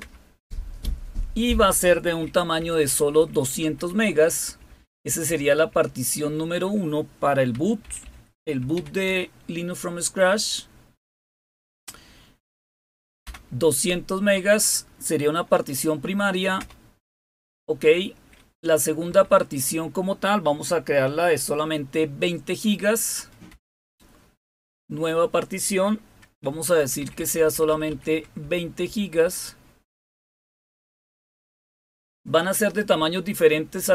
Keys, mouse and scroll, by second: 0.0 Return, 2.5 Left, 2.8 Left, 2.9 Left, 3.1 Left, 3.3 Left, 3.5 Left, 3.7 Left, 4.4 Delete, 4.6 Delete, 4.9 Delete, 5.7 Delete, 6.2 Delete, 7.5-9.1 typing, 13.2 Return, 16.6 Return, 19.0 Down, 23.5 Return, 26.8 Left, 26.9 Left, 27.1 Left, 27.3 Left, 27.5 Left, 27.7 Left, 27.9 Left, 28.4 Delete, 28.6 Delete, 28.8 Delete, 29.1 Delete, 29.9 Delete, 31.0 typing.